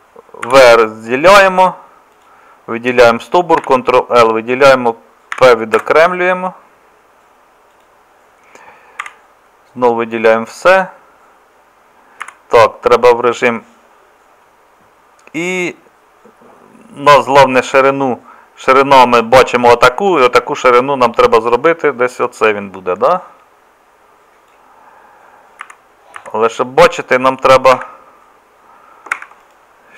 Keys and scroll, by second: 0.5 v, 3.6 ctrl+l, 5.3 p, 9.0 a, 12.2 z, 17.7 z, 25.6 z, 26.2 z, 27.7 Escape, 29.1 Escape.